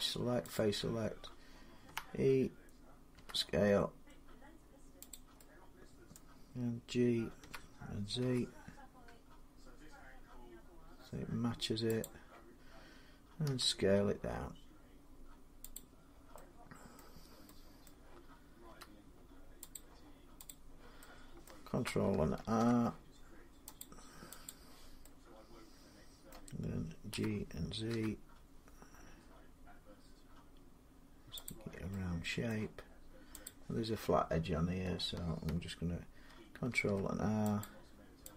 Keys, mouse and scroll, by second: 0.3 click, 1.7 e, 3.0 s, 4.9 click, 5.9 middle click, 7.2-8.8 typing, 11.8 click, 13.3 s, 15.5 click, 16.8 middle click, 17.7 middle click, 18.5 s, 19.5 click, 20.4 click, 21.3 middle click, 22.2 ctrl+r, 23.6 click, 24.3 click, 26.1 middle click, 26.9-28.6 typing, 31.3 click, 32.3 middle click, 32.3 g, 33.3 click, 36.5 ctrl+r, 37.4 click, 38.2 click.